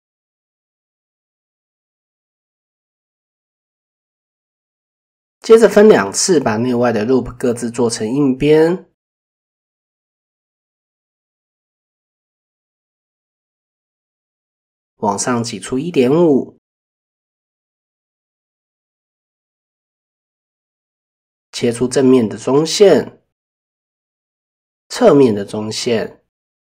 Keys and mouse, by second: 0.8 Tab, 1.8 middle click, 3.8 click, 4.0 Tab, 5.0-5.5 middle drag, 7.2 click, 9.2 click, 10.1 middle click, 15.3-17.5 drag, 18.2 middle click, 19.2 alt+middle click, 22.0-22.6 middle drag, 25.4 middle click, 26.2 shift+middle click.